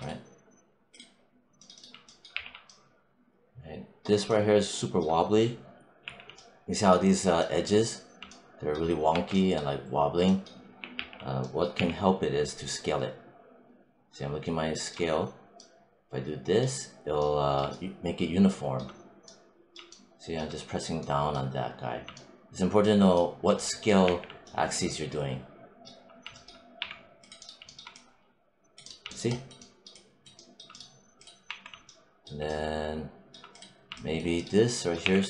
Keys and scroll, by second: 2.2 r, 5.9 4, 9.0 q, 10.8 t, 11.6 r, 23.9 6, 26.6 3, 31.4 1, 34.9 w.